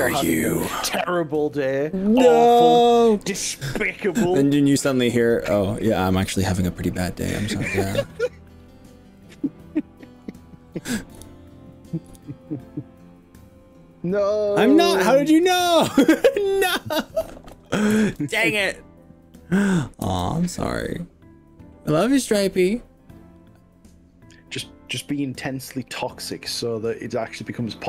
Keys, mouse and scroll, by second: 0.0 KP_1, 0.2 KP_3, 4.2 click, 5.3 click, 7.9 click, 9.2-10.4 middle drag, 12.1 KP_1, 17.6 click, 18.0 ctrl+z, 18.6 click, 20.1 g, 25.6 click, 27.2 click, 27.7 middle click.